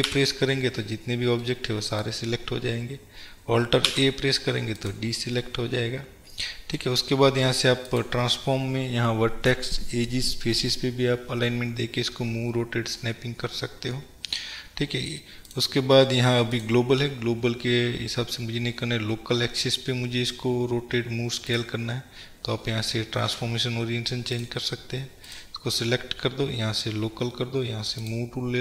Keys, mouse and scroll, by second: 0.2 a, 1.2-1.6 scroll down 2, 2.4-2.8 scroll up 1, 2.8-4.9 middle drag, 2.8-4.0 scroll down 2, 4.0 alt+a, 4.9 click, 5.3 scroll down 2, 5.6-8.0 middle drag, 8.0-15.6 drag, 16.6-24.5 drag, 25.4 click, 28.1 click.